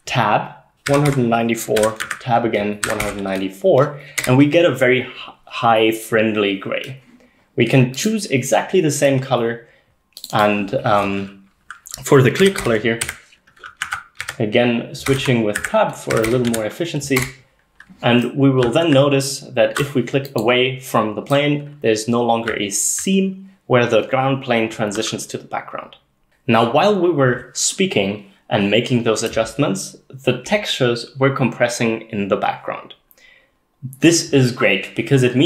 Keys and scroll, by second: 0.9-3.3 typing, 4.2 Return, 12.2-19.5 typing, 13.9 Tab, 15.6 Tab, 22.5-22.9 s, 23.0-24.3 d.